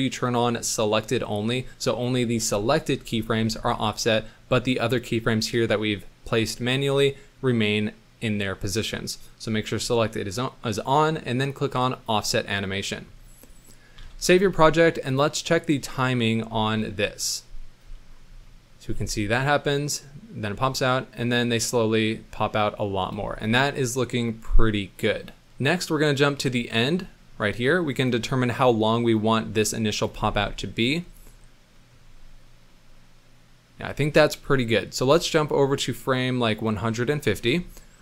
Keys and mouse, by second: 3.9 middle click, 11.9 click, 14.1 ctrl+s, 15.1 click, 16.0 middle click, 16.5 space, 17.8 space, 18.5 middle drag, 18.8 space, 22.5-22.9 middle drag, 23.1 space, 23.3-25.4 middle drag, 25.5 middle drag, 26.1 middle click, 27.2 middle drag, 28.0-30.0 drag, 30.1 space, 31.7 click, 35.0 space, 35.5-37.0 drag.